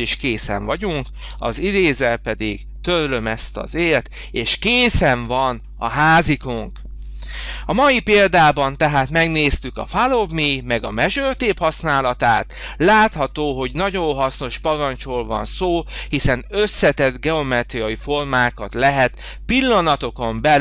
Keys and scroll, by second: 1.2 e, 7.6 h.